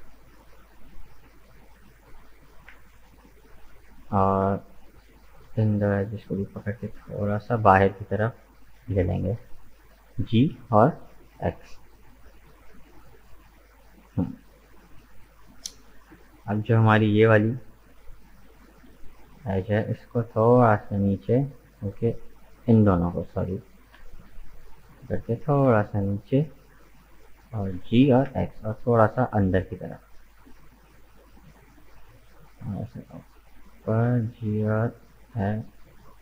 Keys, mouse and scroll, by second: 1.5 middle click, 2.3 right click, 2.9 shift+right click, 3.4 shift+right click, 3.7-6.2 middle drag, 6.2 shift+right click, 6.7 shift+right click, 7.2 shift+right click, 7.4-8.7 middle drag, 8.7 g, 11.8-15.8 middle drag, 15.8 right click, 16.5 shift+right click, 17.1 shift+right click, 17.5-18.6 middle drag, 18.6 shift+right click, 18.9-20.4 middle drag, 20.4 g, 22.0 middle click, 23.0 right click, 23.6 right click, 24.1 shift+right click, 24.4 middle click, 25.4 g, 27.7 g, 30.6-32.2 middle drag, 32.2 g, 34.0 g.